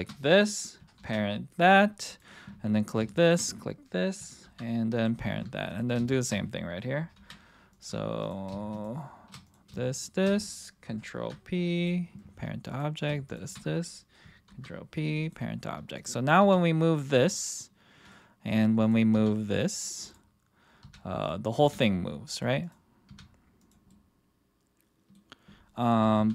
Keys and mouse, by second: 1.0 ctrl+p, 4.4 ctrl+p, 5.7 click, 6.1 shift+click, 7.1 ctrl+p, 8.2 click, 9.9 shift+click, 11.1 ctrl+p, 12.7 click, 14.5 ctrl+p, 16.0 click, 16.4 g, 17.2-17.5 drag, 18.1-18.5 middle drag, 19.1 r, 20.0-20.8 drag, 20.8 r, 21.2 click, 21.6 r, 23.1 r, 23.9-25.1 middle drag, 26.2 ctrl+z.